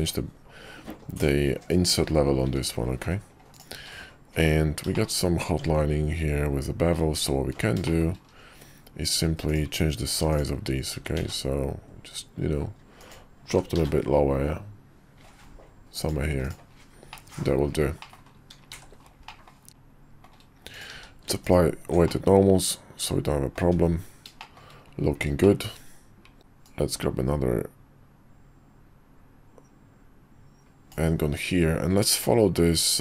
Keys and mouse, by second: 2.4 `, 3.7 q, 4.9 shift+middle click, 5.5 Tab, 7.0 Tab, 7.8 shift+middle drag, 9.4 click, 10.3 shift+drag, 10.9 s, 13.5 g, 16.4 click, 17.1 middle click, 18.0 middle click, 18.7 shift+2, 19.3 middle drag, 19.7-20.2 shift+middle drag, 19.7 `, 19.7 KP_5, 20.9 q, 22.1-23.5 middle drag, 23.6 `, 24.4 middle click, 25.4 middle drag, 26.6-30.9 drag.